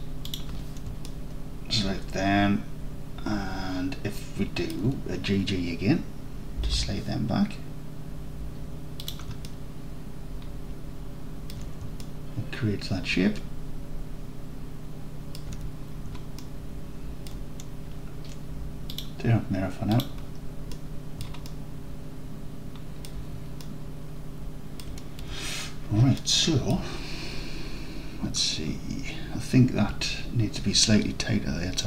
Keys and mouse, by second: 0.3 ctrl+click, 1.1 alt+middle click, 2.2-4.5 alt+middle drag, 4.7 alt+middle click, 6.6 g, 6.8 g, 9.1 click, 9.6-11.5 alt+drag, 12.1-13.4 alt+drag, 13.7-15.3 alt+drag, 15.6 Tab, 16.5-17.3 alt+drag, 19.0-20.1 drag, 20.8 middle click, 20.9 middle drag, 21.5-22.3 alt+drag, 22.4 alt+click, 22.6 alt+click, 23.0 alt+click, 23.7-24.9 alt+drag, 25.3 Tab, 26.3 alt+drag, 26.7 alt+click.